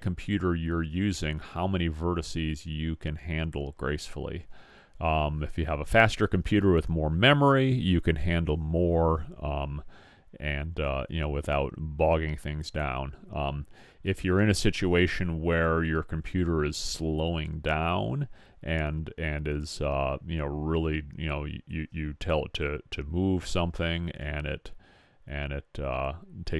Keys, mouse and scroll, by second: 22.1 click, 24.5-26.4 middle drag.